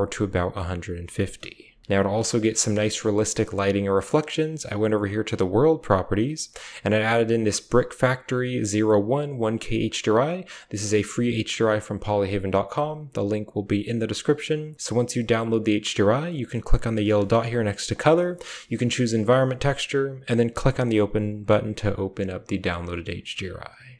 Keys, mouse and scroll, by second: 0.3-1.1 middle drag, 1.7 h, 1.8 KP_0, 1.8 a, 6.7-8.1 drag, 11.2 click, 17.8-20.0 drag.